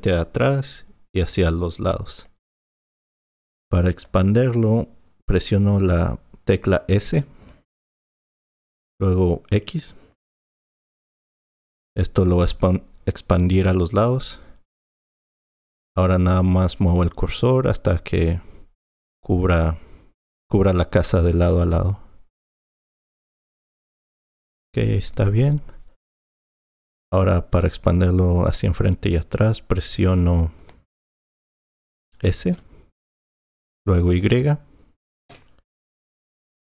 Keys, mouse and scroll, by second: 8.1 s, 32.6 s, 35.3 y.